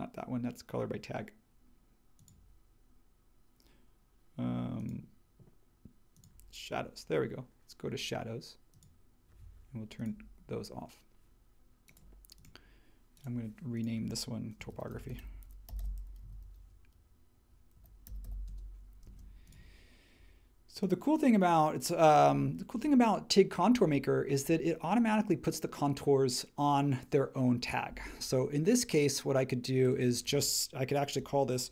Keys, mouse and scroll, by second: 14.4-19.0 typing.